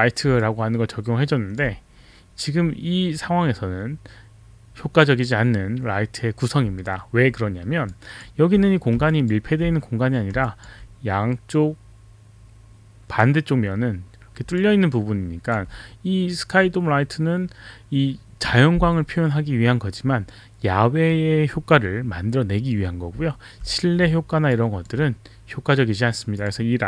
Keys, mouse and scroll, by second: 0.3 alt+click, 7.9 alt+click, 9.1 alt+click, 10.4 alt+click, 14.6 alt+click, 24.1 alt+middle click, 24.5 alt+click, 26.4 click.